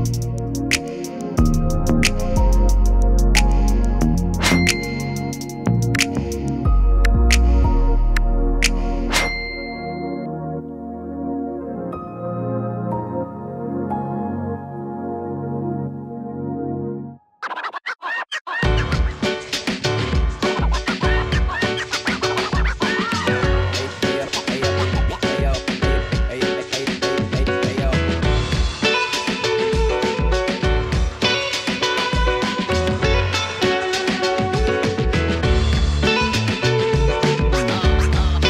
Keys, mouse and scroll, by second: 0.4 click, 2.4 space, 12.6 space, 13.0-23.6 drag, 23.6 ctrl+space, 24.4-25.8 typing, 31.4-38.4 drag.